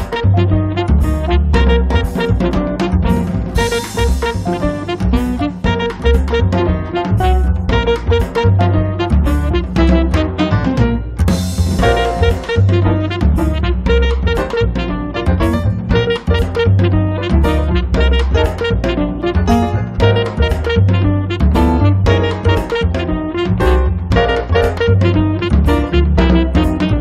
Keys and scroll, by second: 0.6 Escape, 11.7 m, 12.9 Up, 15.5 Up, 18.1 Up, 22.1 Up, 26.8 1.